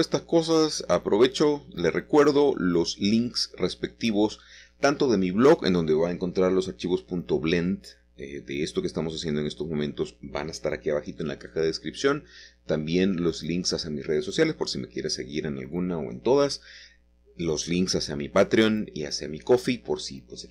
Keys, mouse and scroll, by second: 0.2 shift+click, 1.2 shift+click, 4.1 click, 5.1-6.2 scroll down 2, 6.2 middle click, 6.5-7.5 scroll up 1, 7.5-8.8 scroll up 1, 8.8-10.3 scroll up 1, 9.2 middle click, 9.8 shift+middle click, 11.2 middle click, 12.1-13.6 drag, 13.6 middle click, 13.8 click, 14.1 middle click, 14.8-16.2 drag, 15.9 middle click, 16.7 x, 17.2 click, 18.0 middle click, 19.7-20.3 typing, 19.7 click.